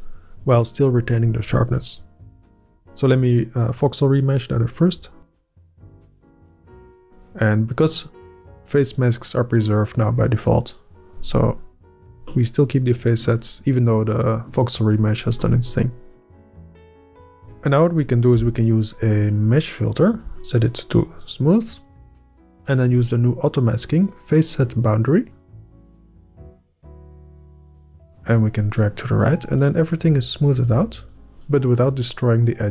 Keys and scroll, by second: 5.3 Up, 6.2 ctrl+Up, 18.9-20.2 Up, 20.7 Up.